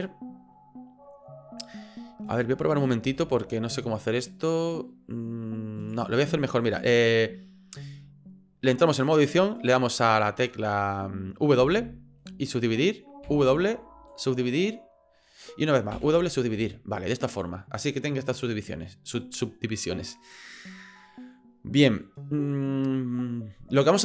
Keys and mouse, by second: 3.0 ctrl+r, 7.2 middle click, 11.6 w, 13.2 w, 15.9 w, 17.1-20.3 middle drag, 21.0-22.0 middle drag.